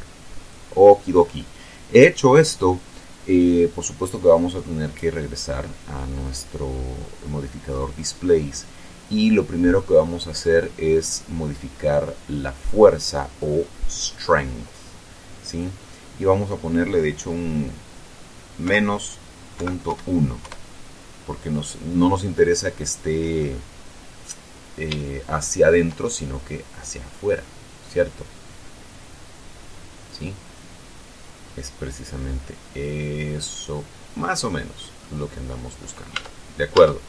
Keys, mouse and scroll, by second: 1.2-2.5 scroll up 2, 5.7 click, 13.0 click, 15.8 click, 19.0 KP_Subtract, 19.9 KP_Decimal, 20.2 KP_1, 20.8 KP_Enter, 22.7-23.9 middle drag, 23.9-24.6 scroll up 1, 25.4 shift+middle click, 26.7 middle click, 27.7-35.3 middle drag, 35.4 middle click, 36.4 Tab.